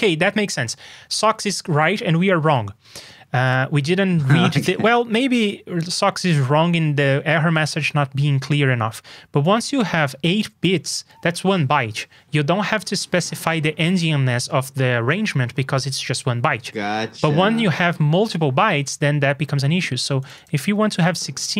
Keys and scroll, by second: 13.0 super+Tab.